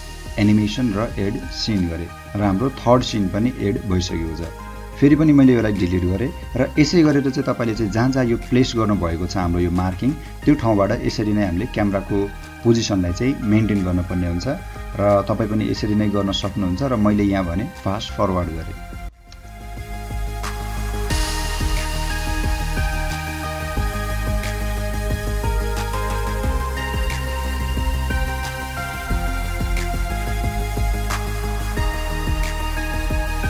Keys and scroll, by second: 4.8 space, 7.5 Delete, 9.8 o, 11.2 h, 14.5 o, 19.3 space, 20.6 6, 20.8 Return, 22.9 h, 22.9 space, 24.6 6, 24.8 Return, 26.3 space, 26.6 o, 27.7-28.8 typing, 31.2 Return.